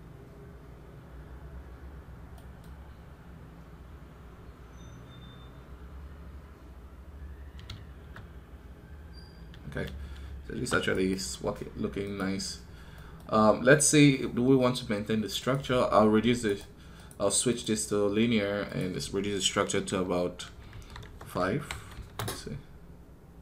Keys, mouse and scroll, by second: 10.8 right click.